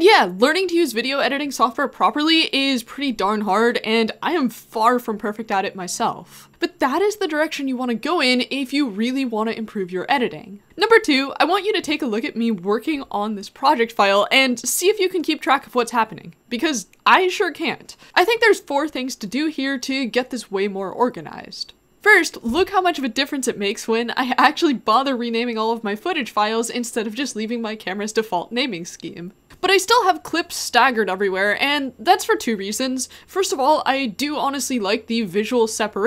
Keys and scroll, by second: 10.7-14.7 typing, 14.9 alt+j, 14.9 alt+j, 15.0 alt+j, 15.2 alt+k, 15.4 alt+k, 15.8 alt+k, 18.0 [, 18.2 ], 18.5 [, 18.7 alt+k, 19.1-19.6 j, 19.7 alt+k, 19.8 alt+k, 19.9 alt+k, 20.8 alt+k, 20.9 alt+k, 21.1 ], 21.3 alt+j.